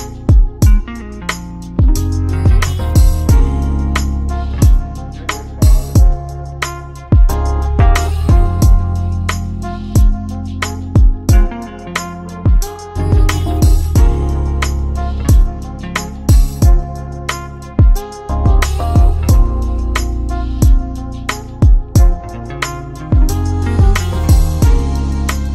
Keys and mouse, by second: 0.7-1.4 drag, 1.4-2.9 middle drag, 2.9 g, 18.1-20.6 middle drag, 20.6 Tab, 21.9 click, 22.1 click, 23.2 f, 24.3 Tab.